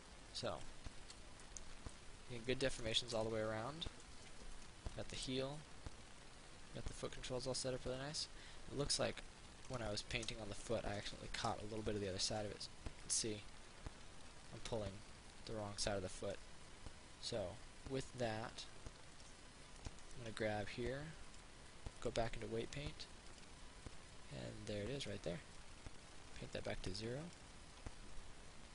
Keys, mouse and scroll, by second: 1.1 ctrl+z, 1.7 middle click, 4.7 right click, 5.8-10.0 drag, 13.3-19.9 drag, 19.9 right click, 21.5 click, 23.5 right click, 25.3-28.0 drag.